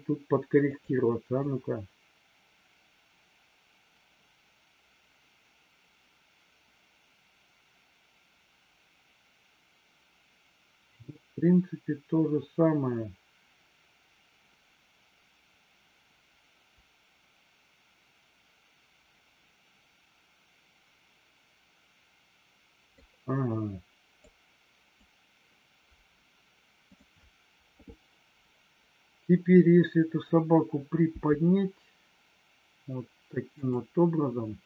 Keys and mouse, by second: 0.7 click, 1.4-23.1 drag, 24.2 click, 26.8 click, 31.1 g, 33.6 click.